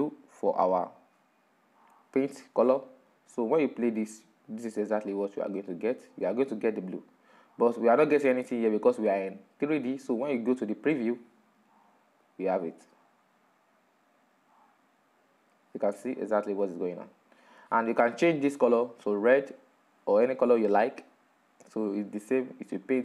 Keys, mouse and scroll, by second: 0.0 click, 1.6 right click, 6.4-13.6 drag, 14.9 click, 20.2-22.7 drag.